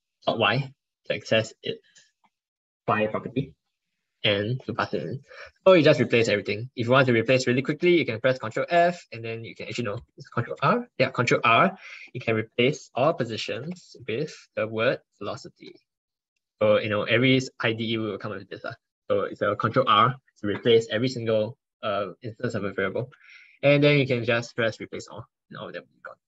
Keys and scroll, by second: 7.6 ctrl+f, 10.4 ctrl+r, 17.7 ctrl+1, 22.9 ctrl+1.